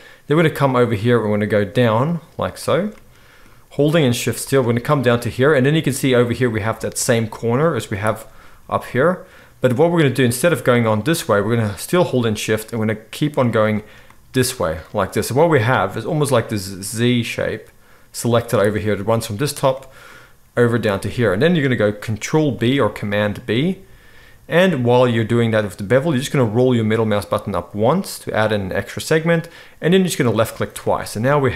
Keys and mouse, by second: 0.9 shift+middle click, 1.0-2.0 shift+right drag, 2.0 shift+middle click, 2.1-2.6 shift+right drag, 2.6 shift+middle click, 2.8 right click, 2.9-11.5 middle drag, 3.9 shift+click, 3.9 shift+right click, 11.5-12.5 shift+right drag, 12.5 shift+middle click, 12.7-13.4 shift+right drag, 13.4 shift+middle click, 13.6-30.4 shift+right drag, 14.8 z, 18.2 z, 22.5 ctrl+b, 30.4 middle click, 30.4-31.5 right drag.